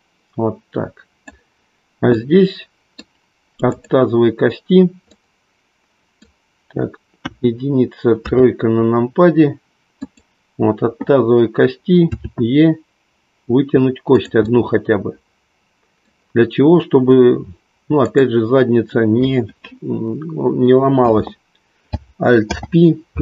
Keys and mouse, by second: 2.2 middle click, 7.1 KP_1, 8.3 KP_3, 10.0 click, 12.4 e, 14.2 click, 14.4-17.0 middle drag, 18.0 click, 22.3 alt+p.